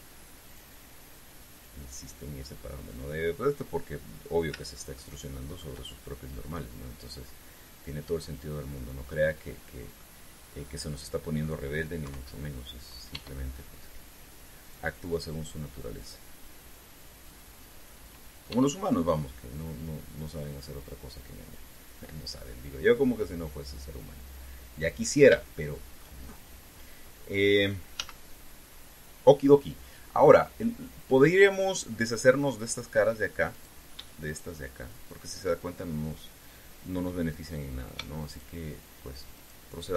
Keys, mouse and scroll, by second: 1.2 click, 1.9-4.5 drag, 5.7 shift+click, 10.7-12.3 drag, 12.8 KP_3, 13.9 e, 15.3 click, 16.7-18.2 drag, 19.3 e, 21.2 click, 22.5-25.8 drag, 26.1 shift+middle click, 28.7 z, 34.3 right click, 35.0 shift+right click, 37.7 middle click, 39.0 shift+right click.